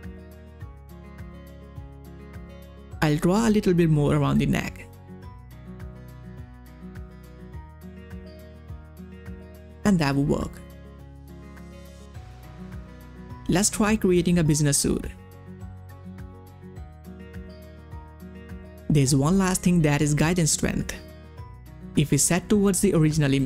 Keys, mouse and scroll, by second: 2.5 ctrl+scroll up 1, 2.6 space, 2.9 [, 3.3-5.0 drag, 5.8 [, 6.0-7.7 drag, 8.3 ctrl+scroll down 1, 9.0 ctrl+space, 9.1 click, 9.8 space, 11.4 space, 12.8 click, 13.4-15.7 typing, 17.1 click.